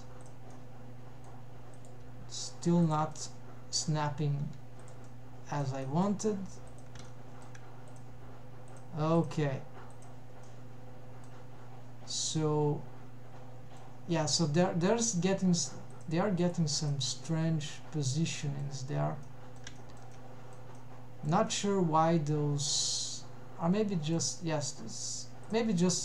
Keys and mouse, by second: 0.6-1.4 middle drag, 1.8 click, 2.9 g, 3.2 middle click, 4.4 g, 5.1 middle click, 5.9 middle click, 7.0 shift+g, 7.1 shift+middle click, 8.0 click, 8.4 g, 9.3 click, 9.6 g, 10.5 middle click, 12.4-13.9 middle drag, 14.7 middle click, 15.4 g, 16.5 click, 16.8 g, 17.2-18.8 middle drag, 19.3 middle click, 19.8 shift+middle drag, 20.3 shift+middle click, 20.9-21.4 middle drag, 21.6-24.3 middle drag, 24.5-25.1 middle drag, 25.5 click, 25.9 middle click.